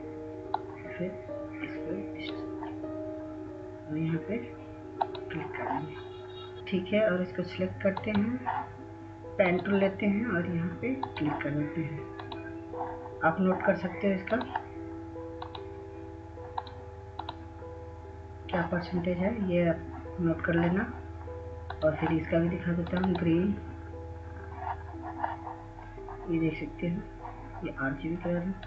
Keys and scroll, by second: 6.2 Delete.